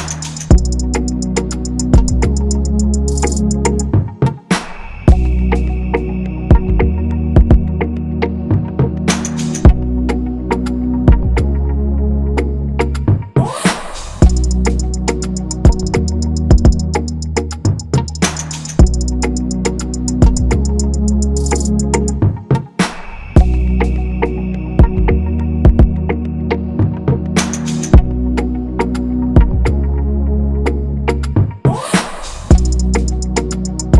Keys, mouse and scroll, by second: 0.8 shift+click, 1.2 right click, 6.5 shift+click, 7.4 shift+click, 9.1 right click, 25.5 ctrl+=, 25.6 ctrl+=, 26.3 shift+click, 26.8 right click, 30.3 double click, 33.3 double click.